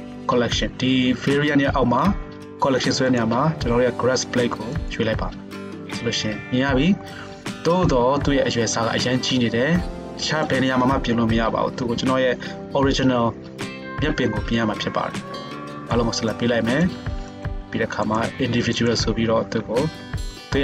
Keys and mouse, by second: 3.3-10.4 middle drag, 11.8 KP_7, 12.8 g, 16.9-19.9 shift+middle drag, 19.6 s, 19.9 click, 19.9-20.6 right drag.